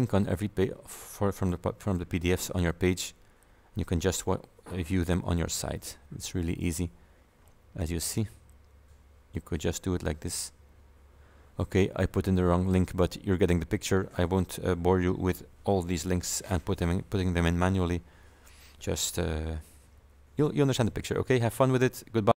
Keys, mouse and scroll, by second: 5.1-5.8 scroll down 3, 5.9 scroll up 1, 6.7 click, 8.1 click, 16.0 alt+Tab, 17.4 alt+Tab.